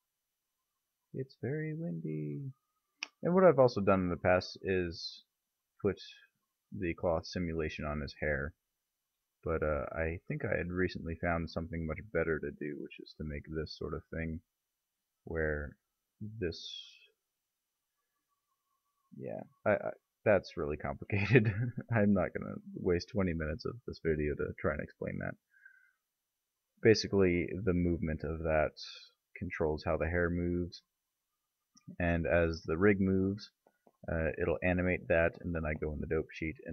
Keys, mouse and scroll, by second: 4.4 click, 5.5-7.3 right drag, 7.3-7.7 middle drag, 7.9 middle click, 9.0 middle click, 10.8 click, 12.7-14.0 right drag, 13.8 g, 14.0-14.3 middle drag, 14.3 right click, 19.3 ctrl+z, 22.4 middle drag, 22.6-23.5 middle drag, 27.8-28.2 middle drag, 28.8 g, 30.7 ctrl+z.